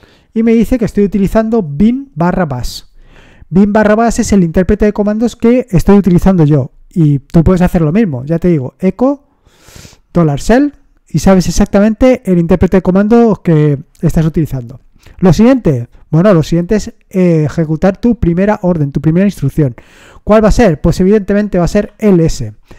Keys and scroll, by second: 8.3 Up, 10.1 Return, 21.6 typing.